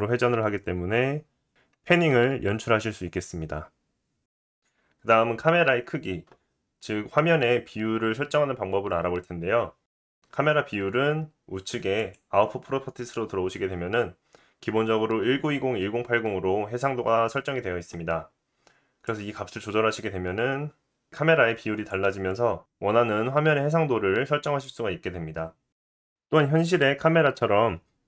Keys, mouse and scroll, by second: 12.0 click, 12.1-19.0 middle drag, 19.0-28.0 drag.